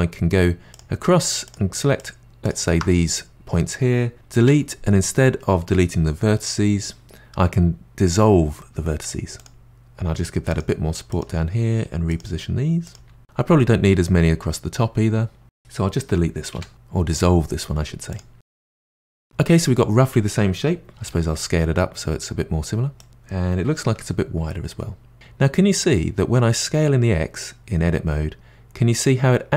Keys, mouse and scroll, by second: 0.7 click, 1.5 shift+click, 1.9 shift+click, 2.4 shift+click, 4.4 Delete, 9.7 g, 10.5 click, 10.6 g, 11.5 click, 11.5 g, 12.5 click, 12.6 g, 15.9 click, 16.5 Delete, 17.9 click, 18.3 g, 20.9 a, 21.0 s.